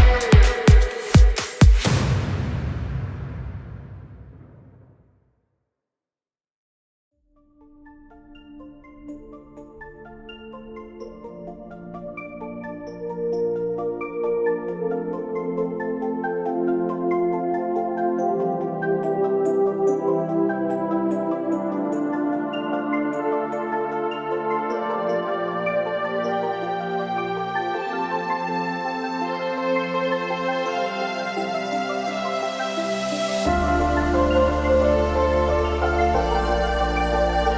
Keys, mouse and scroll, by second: 0.2 click, 1.3 click, 2.3 click, 3.8 click, 5.6-9.6 typing, 10.3 Return, 14.1 click, 15.2 Left, 15.7 Right, 16.8 s, 17.8 Return, 19.9 shift+t, 21.7 click, 22.2 click, 23.8-26.7 drag, 27.7-31.8 drag, 32.5 click, 34.5 click.